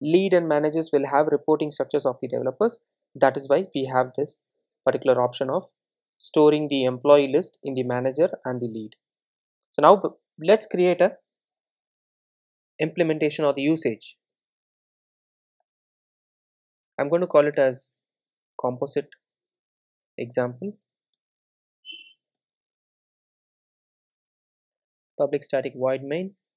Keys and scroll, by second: 14.4 super+n, 15.0 super+n, 25.7 Return.